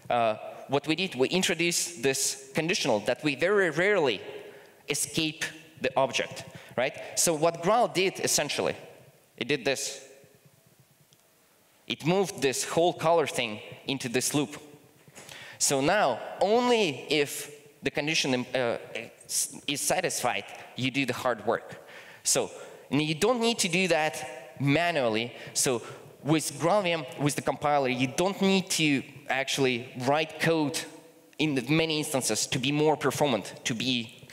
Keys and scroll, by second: 11.7 super+x, 13.0 super+v, 22.3 super+z, 23.5 super+z.